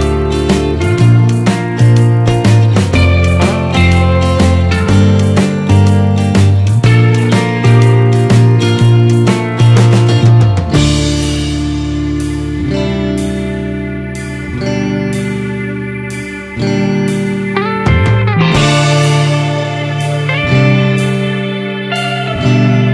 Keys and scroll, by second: 3.0 ctrl+z, 14.2 ctrl+-, 15.2 ctrl+0, 16.7 ctrl+space, 17.1 ctrl+=.